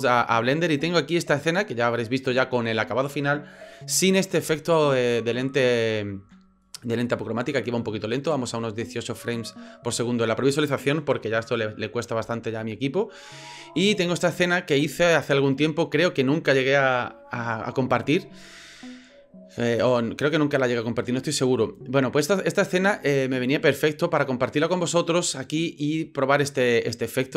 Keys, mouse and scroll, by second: 5.5 drag.